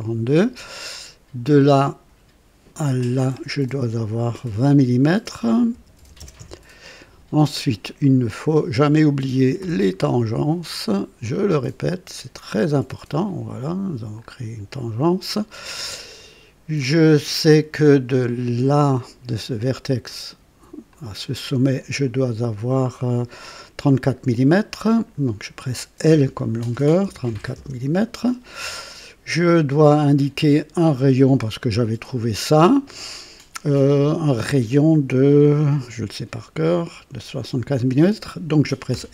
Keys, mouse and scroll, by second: 1.5 click, 2.9 click, 5.7-6.4 typing, 6.6 Return, 9.6 typing, 11.3 click, 13.1 click, 14.2 scroll up 1, 16.1 right click, 18.9 click, 20.9 click, 26.1 l, 27.0 KP_3, 27.3 KP_4, 27.5 Return, 30.8 click, 38.9 r.